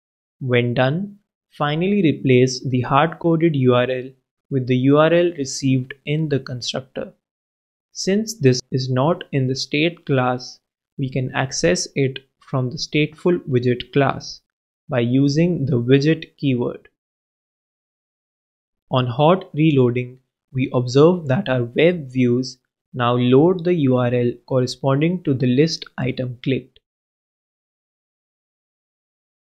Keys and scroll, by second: 0.1 shift+Right, 0.4 shift+t, 1.6 super+., 1.8 alt+super+l, 7.2 shift+super+Right, 7.5 shift+super+Left, 7.8 shift+w, 20.4 super+s.